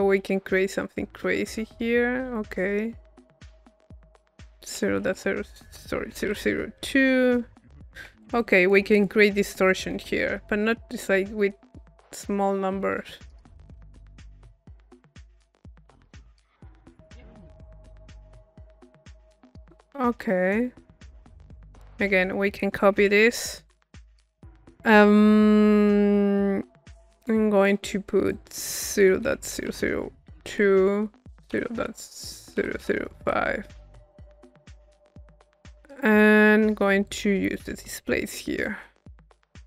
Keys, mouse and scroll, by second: 3.9 click, 8.4-9.9 drag, 9.9-20.5 middle drag, 20.5-21.6 drag, 21.9 right click, 23.2 c, 23.7 click, 24.2-27.2 middle drag, 27.2-29.0 drag, 34.3 middle click, 34.7 click, 35.3 middle click, 37.1-38.4 drag, 38.6-39.6 drag.